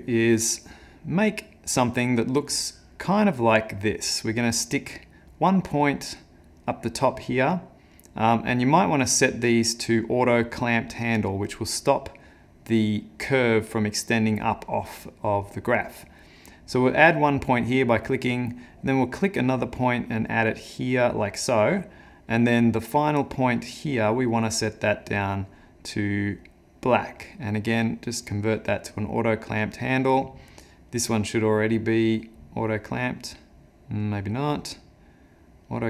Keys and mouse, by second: 2.5 click, 8.3 click, 12.4 click, 22.1 click, 23.3 click, 26.4 click, 27.8 click, 30.9 click, 32.7 click, 34.5 click.